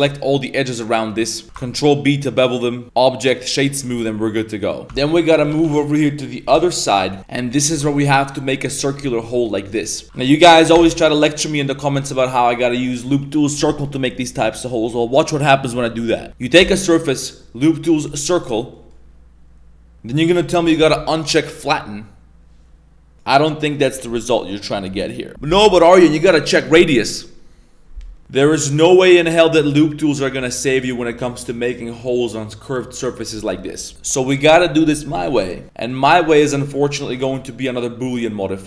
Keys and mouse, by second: 0.1 middle drag, 0.8 middle click, 1.2 middle click, 1.4 ctrl+b, 2.8 Tab, 2.8-3.4 drag, 4.0-4.8 middle drag, 4.8 ctrl+s, 4.8 Tab, 4.9 middle click, 5.3 3, 5.4 a, 5.7 b, 6.4 KP_Decimal, 7.2 Tab, 10.0 i, 16.5 w, 18.7 middle drag, 28.2 click, 29.4-32.0 drag, 33.9 ctrl+z, 35.6 Tab, 35.6 middle click, 36.4 middle click, 37.1 3, 37.3 right click, 37.4 right click, 37.6-38.1 middle drag, 38.2 middle drag, 38.5 shift+middle drag.